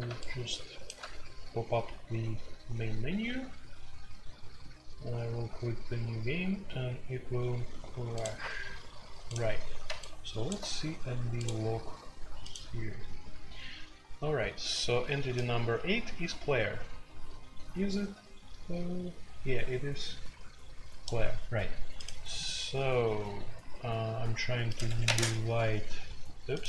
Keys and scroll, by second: 24.8 Escape, 25.0 space, 25.1 Tab, 26.6 Escape.